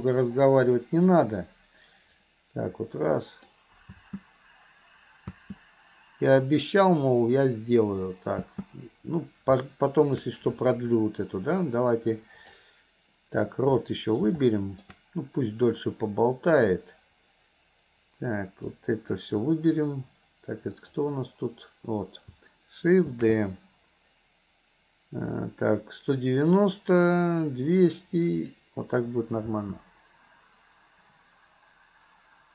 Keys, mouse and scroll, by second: 2.3-3.6 drag, 4.0 space, 8.4 space, 9.7-10.2 middle drag, 11.6-12.6 drag, 13.8-14.2 middle drag, 14.5-14.9 middle drag, 15.7-16.9 drag, 18.8-19.4 drag, 20.9 click, 29.6 space.